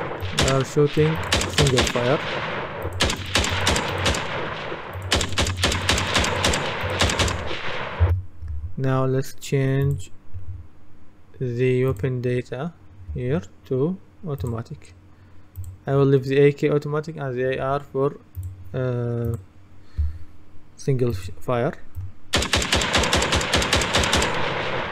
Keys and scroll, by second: 8.1 Escape.